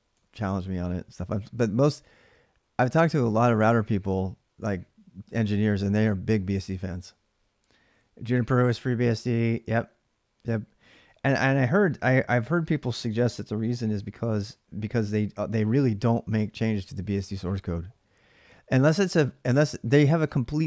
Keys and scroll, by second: 0.0-0.4 typing.